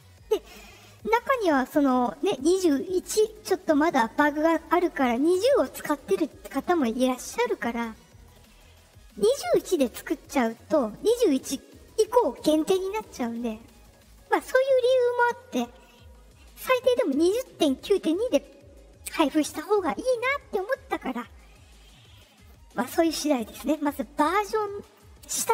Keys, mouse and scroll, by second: 0.4 click.